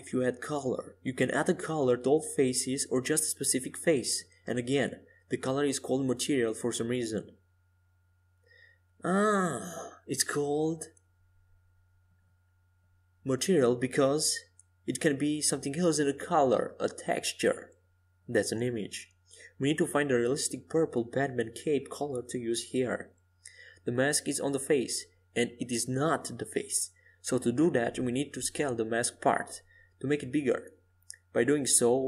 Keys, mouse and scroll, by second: 5.0-8.8 right drag, 7.1-9.4 drag, 13.1-15.4 right drag, 16.0-18.2 drag, 18.3 click, 21.5-23.8 drag, 23.9-26.0 drag, 26.5-28.9 drag, 31.7-32.0 drag.